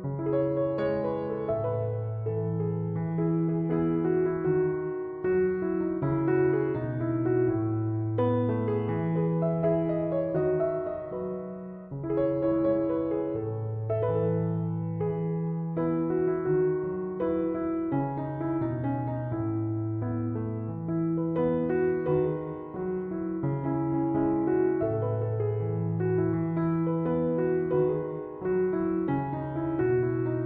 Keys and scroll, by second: 17.0 Return.